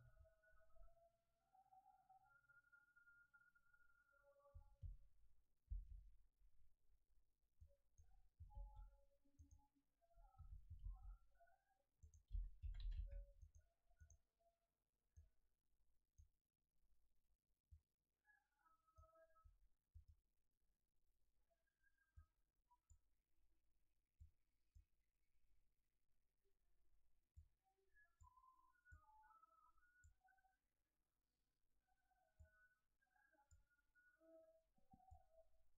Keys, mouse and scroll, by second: 5.7 shift+F3, 7.6 click, 8.5 shift+a, 10.8 shift+a, 15.1 click, 17.7 click, 28.9 click, 32.3 click, 35.1 click.